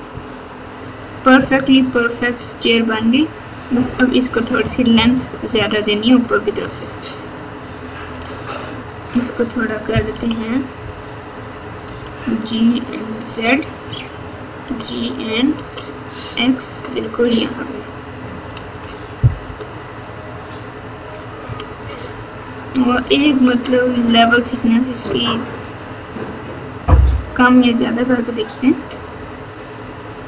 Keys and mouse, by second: 0.0-1.9 typing, 3.8 KP_4, 4.0 KP_4, 4.2 KP_1, 5.5 KP_3, 6.6 Tab, 8.2 alt+z, 8.4 click, 10.1 KP_1, 11.8 g, 14.6 g, 17.4 click, 18.5 alt+z, 19.4 KP_8, 21.4-23.3 typing, 25.3-28.7 drag.